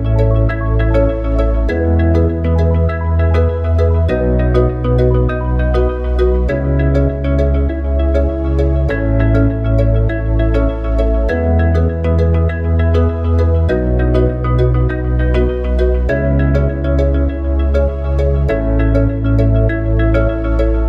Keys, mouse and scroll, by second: 5.2 click, 10.5 shift+a, 18.2 KP_1, 18.8 KP_1.